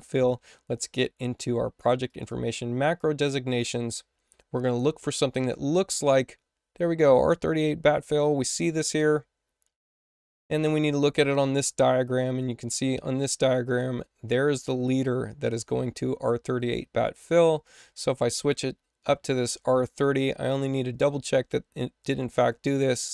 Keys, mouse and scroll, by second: 2.0 click, 2.2 click, 13.6 click, 17.6 click, 22.3 click.